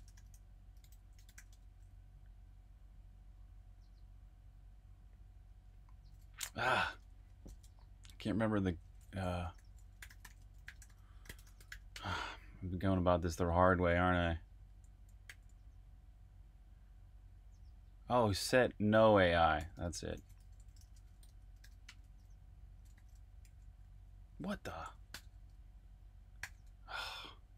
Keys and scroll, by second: 0.6-1.8 typing, 6.7 ↺, 9.3-12.4 typing, 14.0-15.2 typing, 19.3-22.9 typing, 23.4 super+v, 25.1 Escape, 26.4 u, 27.4-27.5 typing.